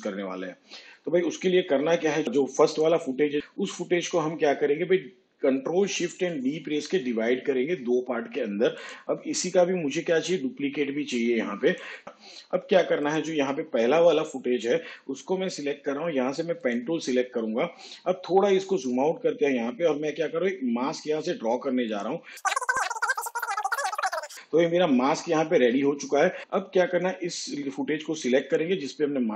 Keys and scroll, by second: 7.5 ctrl+shift+d, 11.1 ctrl+d.